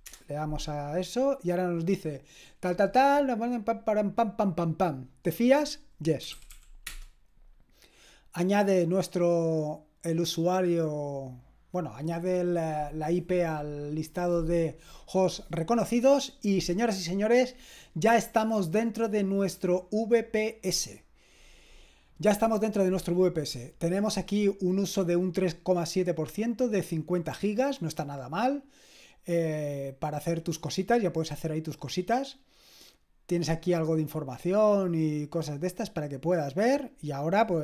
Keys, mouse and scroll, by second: 0.1 Return, 6.0-7.0 typing, 36.6-37.6 drag.